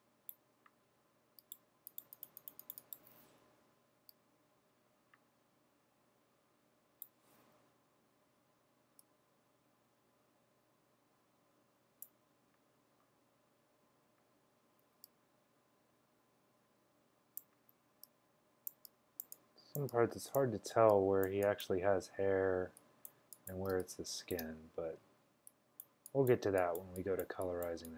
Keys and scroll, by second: 3.5 typing, 14.9 x, 17.8 x, 23.8 space, 24.3 space, 24.4 space, 24.4 space.